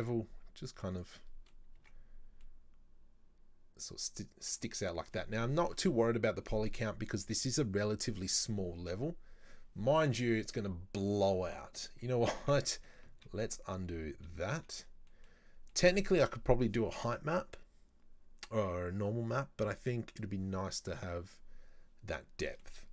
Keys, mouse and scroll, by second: 1.3 middle click, 1.6-2.5 scroll down 6, 1.8 Tab, 2.5-5.5 middle drag, 12.5 Tab, 12.8 middle click, 13.3 ctrl+z, 13.8 ctrl+z, 14.6 ctrl+z, 15.1 middle click, 15.5 scroll up 2, 15.8-18.8 middle drag, 19.7-21.8 scroll down 2, 22.5 middle click, 22.8-22.9 scroll up 2.